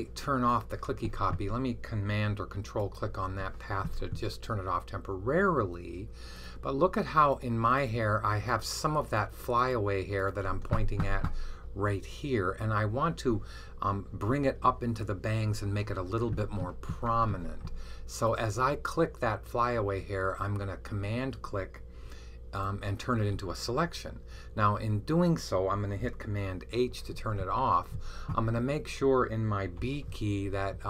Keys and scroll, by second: 26.7 super+h, 29.7 b.